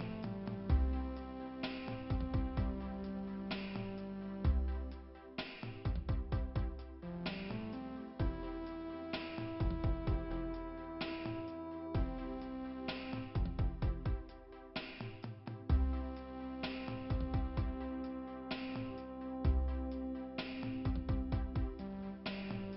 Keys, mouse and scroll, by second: 3.9 right click, 4.7 click, 6.1 click, 7.4 click, 8.3 click, 10.2 click, 12.5-14.7 typing, 17.8 click, 18.0 click, 18.3 click, 20.6 click.